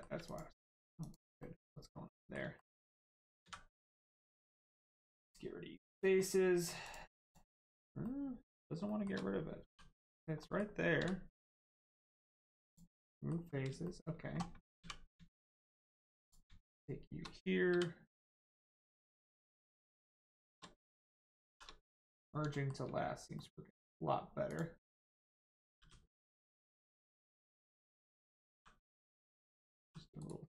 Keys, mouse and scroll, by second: 0.2 click, 1.0 click, 1.4 middle click, 2.6 shift+middle click, 5.2 click, 6.2 middle click, 6.8 click, 8.0 middle click, 8.8 shift+middle click, 9.6 middle click, 9.6 g, 10.1 right click, 10.4 middle click, 12.6 click, 13.1 middle click, 13.8 shift+middle click, 16.2 click, 16.7 shift+click, 17.7 m, 18.4 click, 20.0 shift+click, 21.5 shift+r, 22.1 click, 22.5 shift+middle click, 23.3 middle click, 23.4 middle click, 24.4 click, 25.8 g, 26.7 right click, 28.0 click, 28.5 g, 28.8 right click, 29.4 click, 29.8 g, 30.2 right click.